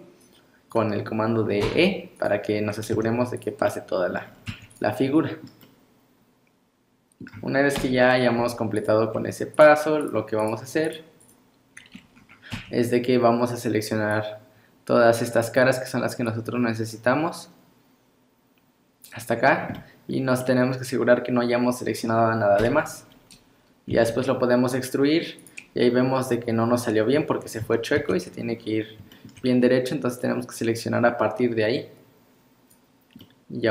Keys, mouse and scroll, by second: 0.2 click, 1.6 e, 2.9 z, 3.7 middle click, 4.2 scroll down 5, 4.5 Tab, 4.7 click, 5.4 middle click, 5.6 middle click, 7.8 KP_1, 8.4 z, 9.1 scroll up 4, 9.5 click, 10.0 click, 10.4 click, 10.9 click, 11.2 click, 12.2 scroll up 2, 12.6 Tab, 14.2 click, 16.3 click, 19.8 middle click, 20.4 middle click, 22.7 KP_1, 24.0 e, 27.1 scroll down 2, 27.7 ctrl+z, 28.0 ctrl+z, 28.6-29.0 scroll up 1, 29.1 shift+middle click, 29.1 scroll up 1, 30.2 click, 33.2 middle click.